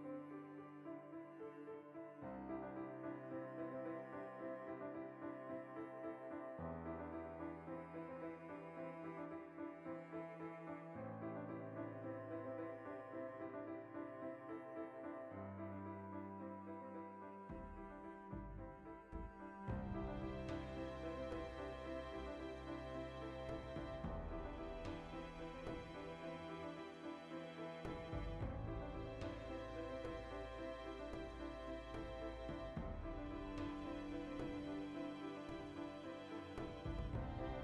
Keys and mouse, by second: 0.1 Tab, 2.7 alt+q, 6.1 \, 6.7 alt+q, 7.4 alt+q, 11.5 ctrl+middle drag, 11.7 right drag, 11.9-19.0 ctrl+middle drag, 19.0 shift+right drag, 19.2-19.6 middle drag, 19.6-20.4 shift+right drag, 20.4-21.3 middle drag, 21.3 shift+right drag, 21.5-24.2 shift+middle drag, 22.7 Left, 24.2 shift+right click, 24.7 \, 25.0 middle drag, 25.2 right drag, 25.4-29.3 shift+middle drag, 25.7 alt+q, 28.0 Tab, 29.3 ctrl+r, 29.8-33.4 shift+middle drag, 33.4 k, 35.2-37.6 middle drag, 37.2 ctrl+z.